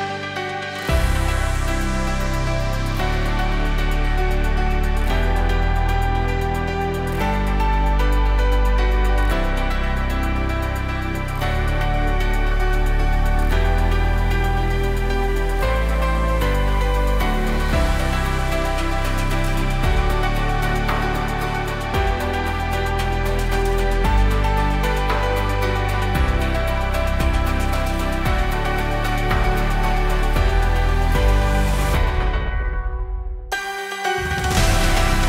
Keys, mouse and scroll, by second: 1.7-2.8 typing, 1.9 Tab, 5.4-23.0 drag, 5.4 typing, 24.0-24.4 typing, 24.7 Tab, 25.9 Tab, 26.7 typing, 29.6-33.9 drag, 34.0 click.